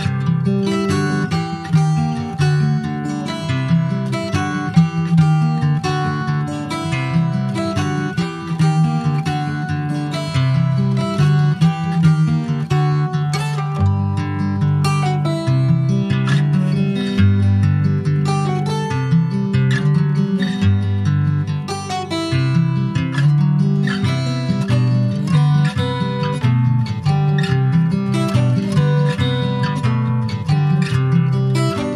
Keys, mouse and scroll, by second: 0.3 Tab, 0.8-1.9 middle drag, 1.9 ctrl+b, 6.7 click, 8.1-11.2 drag, 11.3-13.4 middle drag, 13.4 Tab, 13.6 click, 13.9 middle click, 14.4 ctrl+s, 14.9 /, 16.0 click, 16.3 scroll down 2, 16.4 middle click, 17.2 click, 17.5-17.8 scroll down 3, 17.8 middle click, 18.5 shift+scroll up 1, 18.7 click, 19.0 middle click, 19.6 scroll up 1, 19.9 ctrl+s, 20.0 middle click, 20.3 scroll up 2, 20.6 ctrl+s, 21.1 click, 21.7 shift+click, 22.9 ctrl+j, 23.1 ctrl+click, 23.4 middle click, 23.8 click, 24.2 middle click, 24.7-25.2 scroll up 4, 25.2-27.6 middle drag, 27.6 click, 27.9 scroll down 4, 28.2 shift+middle click, 28.8 shift+click, 29.3 shift+click, 29.8 shift+click, 30.1 scroll down 2, 30.4 alt+middle click, 31.3 alt+middle click, 31.8 click.